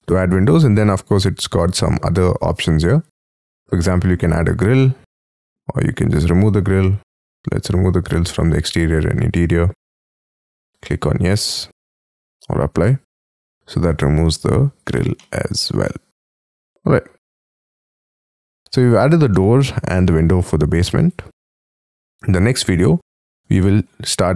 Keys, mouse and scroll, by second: 0.0 scroll down 1, 13.2 middle click, 14.3 space, 15.1 middle click, 17.4-17.9 scroll up 8, 18.0-19.3 scroll down 26, 19.3 middle click, 20.6 scroll down 3, 20.9 Escape, 21.1 Escape, 21.3 scroll down 5, 21.5-22.0 scroll up 6, 22.0 middle click, 22.5-23.3 scroll down 19, 23.5 shift+middle click.